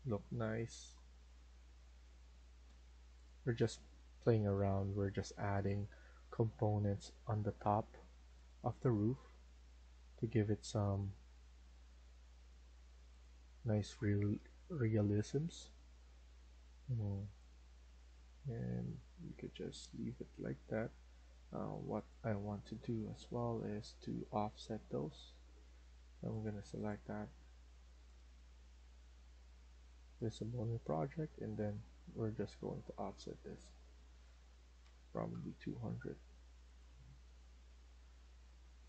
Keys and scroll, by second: 6.0 Escape, 6.3 Escape, 6.5 Escape, 15.8 Escape, 25.8 Escape, 34.7-35.0 typing, 37.0 Escape, 37.3 Escape.